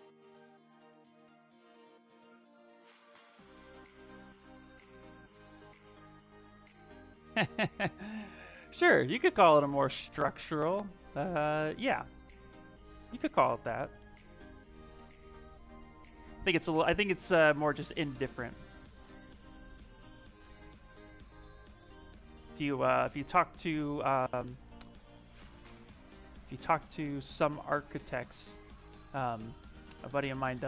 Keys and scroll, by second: 8.9 s.